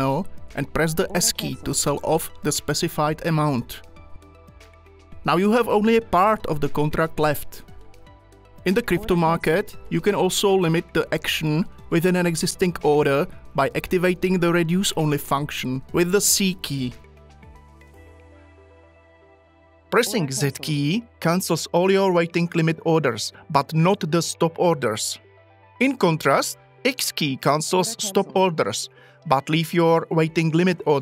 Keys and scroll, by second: 1.1 s, 9.0 s, 20.1 z, 27.7 x.